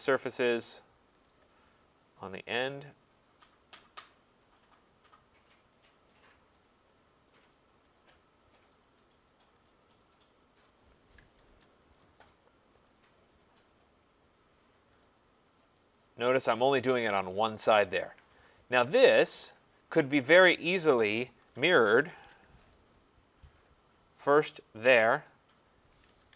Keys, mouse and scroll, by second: 0.2 scroll, 1.2 click, 2.7 click, 4.7 click, 5.8 click, 6.6 click, 7.0-7.6 scroll, 7.6-8.0 scroll down 4, 8.0 right click, 8.8 click, 9.7 click, 10.7 click, 11.5 Return, 12.0 right click, 12.9 click, 13.8 click, 15.0 click, 16.0 click, 16.6 scroll down 5, 19.1 right click, 19.5-20.7 scroll down 2, 20.7 click, 20.7 scroll, 21.2-22.6 typing, 23.5 click, 24.9 click, 25.6-26.3 typing.